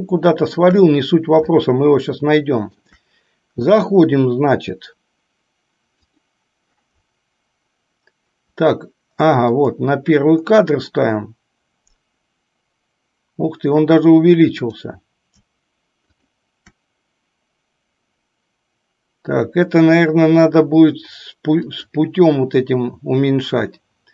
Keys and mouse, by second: 0.0-0.8 shift+middle drag, 1.8-3.0 shift+middle drag, 6.1 click, 9.8 click, 21.9 click.